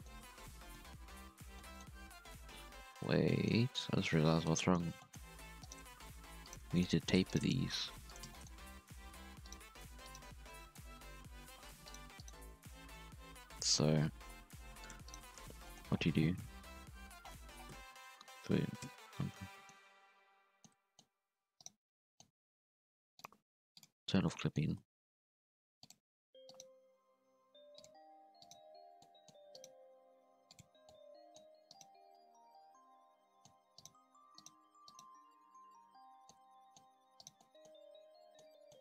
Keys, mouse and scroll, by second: 0.5 KP_1, 1.2-1.5 scroll up 1, 1.5 middle click, 1.9 alt+a, 2.5 KP_3, 3.2 middle click, 3.9-4.4 scroll up 1, 4.4 KP_1, 4.9 shift+middle click, 5.1-5.6 scroll up 2, 5.6 alt+shift+right click, 5.9 s, 6.6 shift+middle click, 6.9 alt+a, 7.2 alt+shift+right click, 7.5 s, 8.3 shift+middle click, 8.6 alt+a, 9.4 right click, 9.6 g, 10.3 scroll down 1, 10.5-11.5 middle drag, 11.5 scroll down 1, 11.7 Tab, 11.8 right click, 12.2 right click, 12.8 h, 13.6 ctrl+z, 14.2 g, 15.0 right click, 15.2 Tab, 15.3-15.6 scroll up 1, 15.6 shift+middle click, 15.8 shift+scroll down 1, 15.9-16.6 scroll up 1, 16.6 KP_1, 17.0 alt+a, 17.2-17.7 scroll down 13, 17.7 Tab, 18.8 KP_Decimal, 19.4 scroll up 3, 19.5 middle drag, 19.7 scroll down 1, 19.9 scroll up 1, 20.0 Tab, 20.4 middle click, 21.1-21.5 scroll up 1, 21.5 right click, 21.8-23.1 middle drag, 23.1 click, 23.7 click, 24.2 middle click, 24.7 g, 26.4 right click, 26.7 x, 28.2 1, 28.3 right click, 28.9 middle click, 29.5 right click, 29.7 g, 30.8 middle click, 31.6 right click, 32.8 middle click, 33.7 shift+right click, 34.3 shift+right click, 34.8 shift+right click, 35.5 f, 35.7 scroll down 1, 35.9 middle click, 36.3 Tab, 36.5 middle click, 36.8 Tab, 37.1 right click, 37.3 middle click, 37.6 scroll down 2, 37.7 middle click, 38.7 scroll up 2.